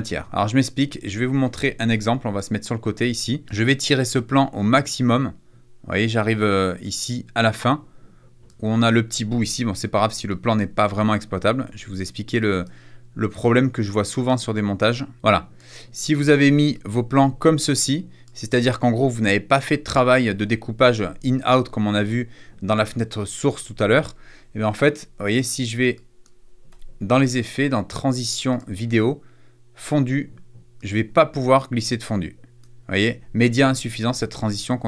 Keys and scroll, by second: 0.2 =, 0.4 -, 10.6 space, 11.4 =, 16.1 =, 20.3 =, 26.6 BackSpace.